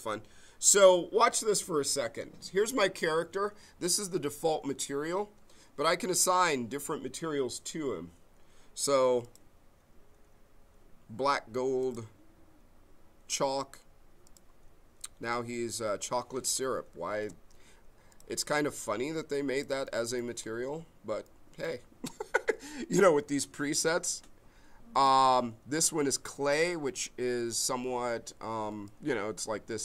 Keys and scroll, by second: 17.2 alt+space.